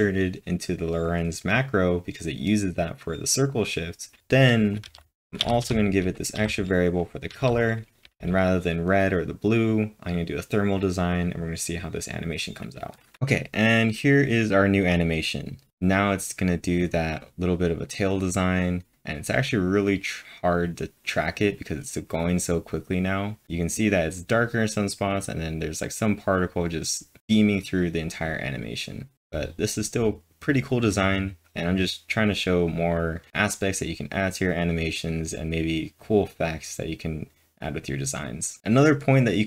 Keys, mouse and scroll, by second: 4.2 typing, 7.1-8.5 typing, 38.6 click.